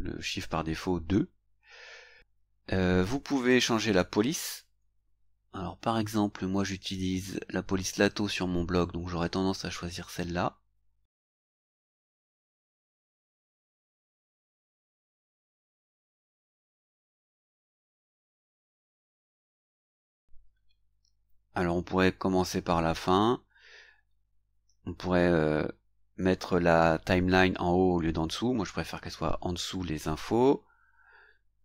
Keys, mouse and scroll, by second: 3.4 click, 10.1 scroll down 1, 11.1 scroll down 1, 15.7 click, 17.4 scroll up 1, 19.5 scroll down 1, 20.3-20.7 scroll down 1.